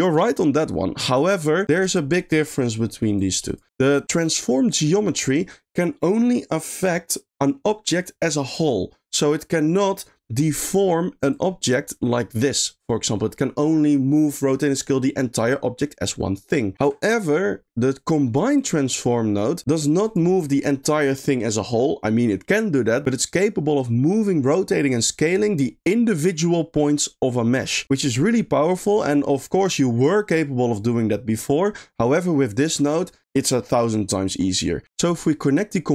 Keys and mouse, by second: 0.0 click, 3.1 click, 3.9 click, 4.7 click, 11.3 click, 16.7 ctrl+click, 17.5 middle click, 17.9 click, 18.1 click, 18.5 click, 19.1 middle click, 19.6 click, 20.0 click, 31.7 middle click, 32.3 click, 32.7 click, 34.8 click, 35.0 middle click.